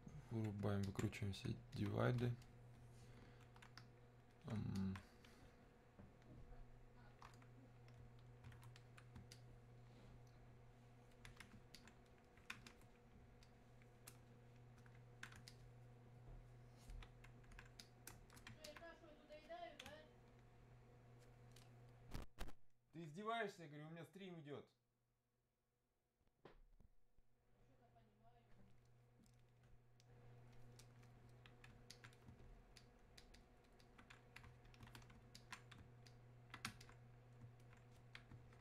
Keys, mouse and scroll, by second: 9.4-25.3 ctrl+drag, 31.9 alt+click.